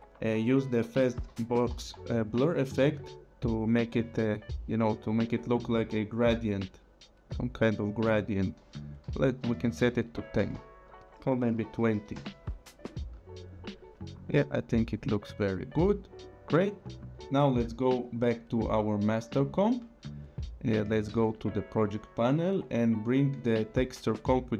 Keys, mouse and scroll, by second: 0.5-2.3 typing, 3.6 click, 6.0 click, 9.4 KP_1, 9.5 KP_0, 10.4 Return, 11.2 click, 11.4 KP_2, 11.5 KP_0, 12.1 Return, 13.5 click, 18.7 click, 21.1 click.